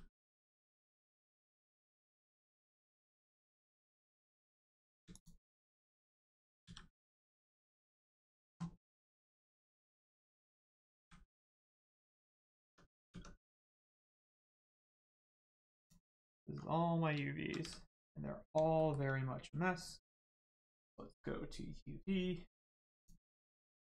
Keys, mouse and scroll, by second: 0.7 a, 0.8-1.2 scroll down 1, 3.0-3.3 scroll up 1, 3.8 middle click, 5.1 shift+click, 6.7 a, 9.2 click, 11.0 a, 11.8 middle click, 12.6 Tab, 13.8-14.5 scroll up 1, 16.5 click, 17.1 scroll down 1, 17.6 a, 18.7 shift+middle click, 20.1 click, 22.9 click.